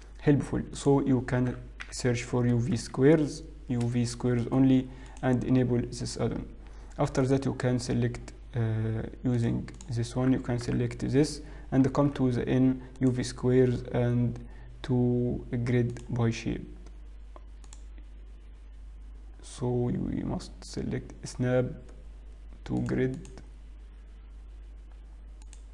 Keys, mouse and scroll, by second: 9.4 click, 9.8 click, 10.8 l, 12.0 n, 13.5 click, 16.0 click, 17.8 click, 22.8 click, 23.2 click, 24.3 scroll down 3, 24.7 scroll up 2.